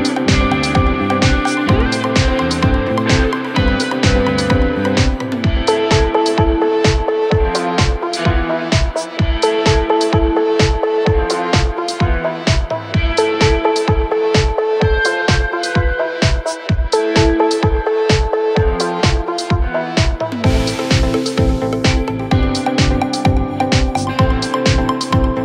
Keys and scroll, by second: 7.1 ctrl+z, 12.5 Delete, 20.5 Escape.